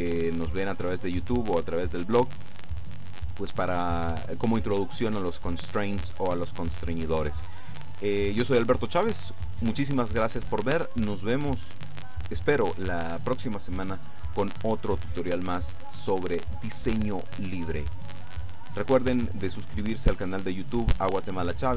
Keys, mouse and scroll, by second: 0.2 middle click.